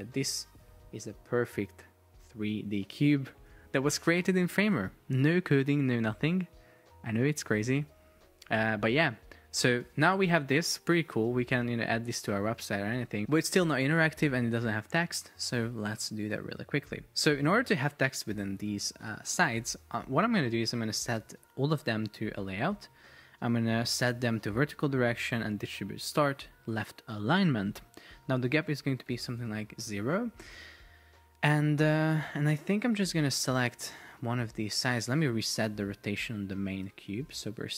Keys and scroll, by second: 0.3 shift+Up, 5.0 shift+Down, 5.7 shift+Up, 7.4 shift+Down, 10.2 Return, 10.8 shift+Down, 11.0 shift+Up, 12.4 shift+Up, 29.3 Return, 37.0 Return.